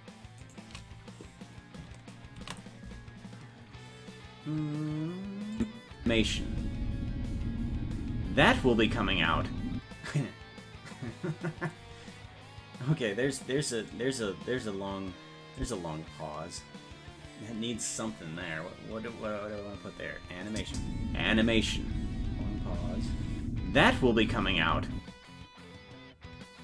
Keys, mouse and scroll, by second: 2.8 ctrl+s, 5.6 click, 6.0 space, 15.6 click, 20.5 click, 20.7 space.